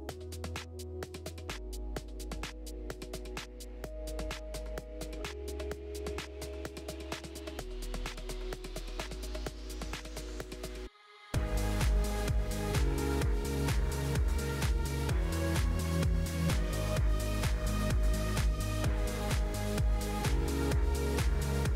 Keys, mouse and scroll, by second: 1.0-4.3 drag, 4.7-7.2 drag, 7.4-10.0 drag, 10.9-17.1 drag, 18.4 g, 21.2 click, 21.6-21.7 scroll up 2.